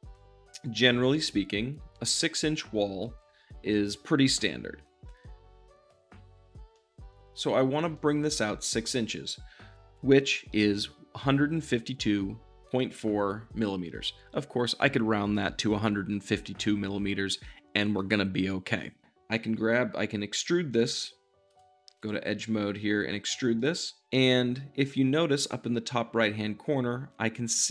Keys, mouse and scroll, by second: 0.0-2.8 drag, 2.8 `, 4.8-6.4 drag, 6.6-7.8 shift+middle drag, 7.9-21.9 shift+middle drag, 21.4 2, 21.9-23.3 drag, 23.3 e, 23.5-27.7 middle drag.